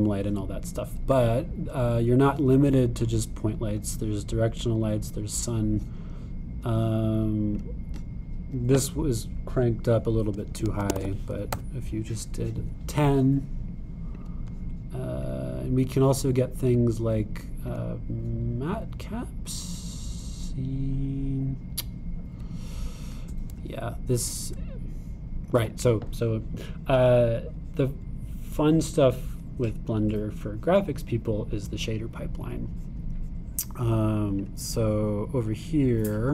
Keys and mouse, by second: 0.7-2.3 middle drag, 2.3 click, 5.8 click, 8.6-15.3 drag, 16.3 click, 17.7-18.8 drag, 24.6-31.1 super+drag, 35.4 click.